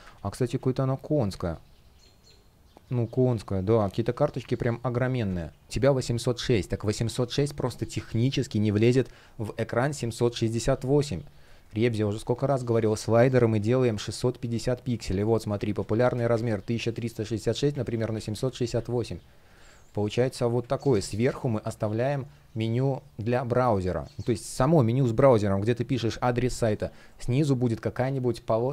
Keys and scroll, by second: 1.0 space, 5.3 BackSpace, 11.2 space, 11.7 F1, 16.2 Tab, 18.1 Return, 19.3 space.